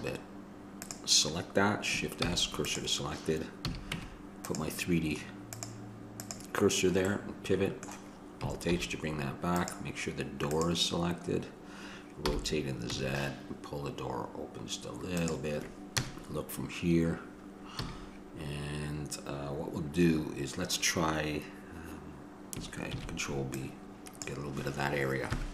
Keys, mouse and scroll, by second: 2.4 shift+s, 3.8 a, 4.1 Tab, 6.2-7.3 drag, 7.3-9.8 middle drag, 8.9 alt+h, 9.8-12.3 right drag, 16.2 KP_0, 18.0 a, 23.2 ctrl+b.